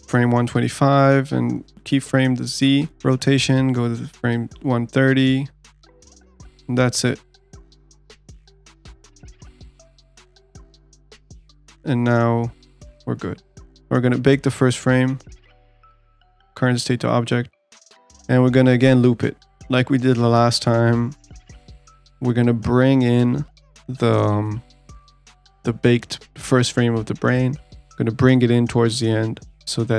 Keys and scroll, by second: 0.1 ctrl+z.